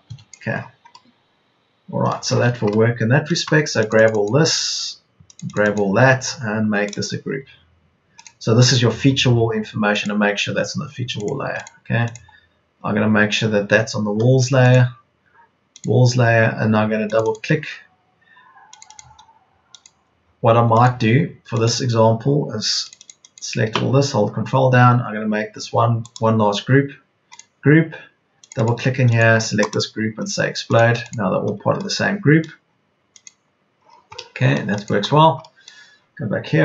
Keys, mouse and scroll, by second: 2.4 Escape, 20.9 Escape.